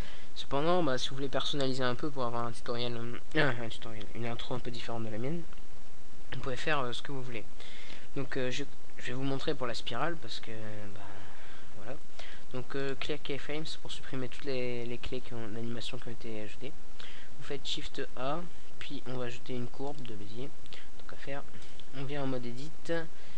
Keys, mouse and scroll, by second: 6.8-8.3 middle drag, 14.4 shift+a, 18.3 Tab, 18.7 middle click, 18.8 middle click, 20.9-22.5 middle drag, 21.9 g, 23.2-23.3 drag.